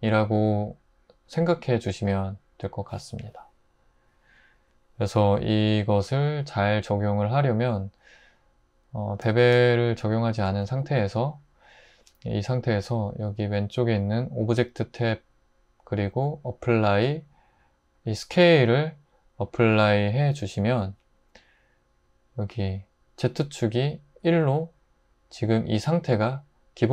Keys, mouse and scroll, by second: 9.5 super+z, 10.0 super+z, 10.7 Tab.